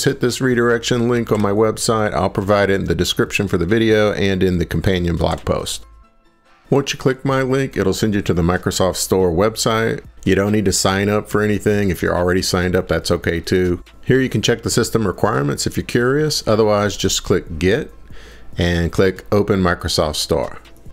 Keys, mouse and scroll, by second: 1.3 ctrl+v, 5.3 Return, 7.3 Return, 11.6 click, 15.8 click, 20.1 click.